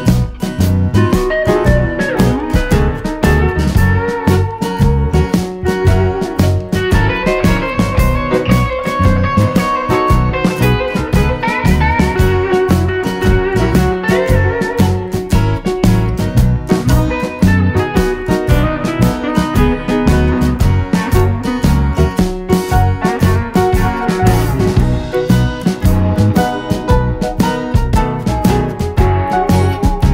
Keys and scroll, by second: 10.7 super+c, 10.8 super+v, 23.0 super+d.